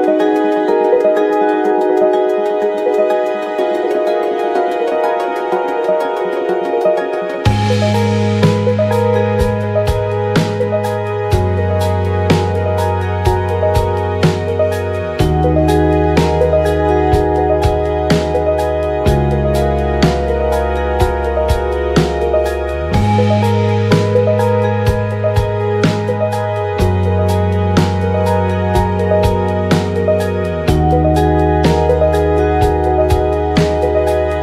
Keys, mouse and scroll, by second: 2.4 KP_1, 2.9 shift+z, 3.4 ctrl+z, 3.7 f, 3.8 right click, 6.8 ctrl+z, 7.4 ctrl+z, 8.3 f, 8.4 right click, 8.8 ctrl+z, 8.9 f, 9.1 right click, 11.7 shift+z, 13.7 KP_1, 14.7 middle click, 14.9 f, 15.0 right click, 15.2-19.3 middle drag, 16.5 g, 18.2 k, 19.3 g, 21.0 shift+z, 22.9-30.0 drag, 22.9 middle click, 22.9-30.7 right drag, 24.6 KP_1, 26.0 shift+z, 27.1 KP_1, 27.3 shift+z, 28.5 shift+z, 29.6 g, 29.8 f, 30.1 g, 30.3 click, 32.9 shift+z, 33.8 shift+z.